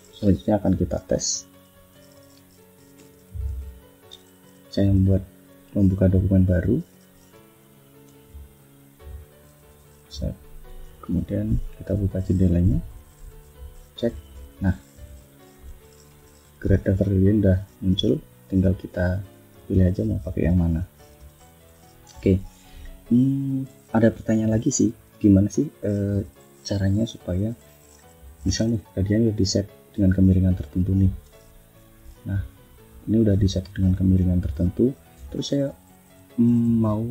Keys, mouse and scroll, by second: 1.0 shift+scroll down 2, 1.3 shift+click, 2.8 ctrl+n, 6.3 click, 6.9 click, 7.9 click, 8.9 click, 9.5 click, 10.3 click, 11.3 ctrl+shift+f, 13.6 click, 15.3 click, 16.5-17.1 scroll down 4, 17.5 click, 18.2 click, 18.8 click, 19.2 click, 19.7 click, 20.1 click, 20.8 click, 21.2 click, 21.8 click, 22.5 F1, 22.8 click, 23.5 click, 29.2 click, 30.9-32.1 drag, 32.5 scroll up 2, 32.8 click, 33.7 click, 34.2 click, 36.9 click.